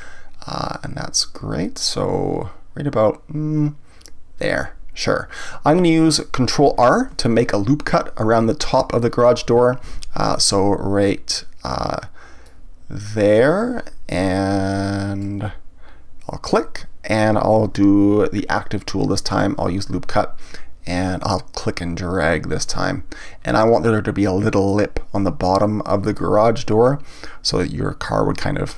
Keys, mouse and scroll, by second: 9.8 ctrl+r, 16.5 click, 19.3 click, 21.6-24.6 drag.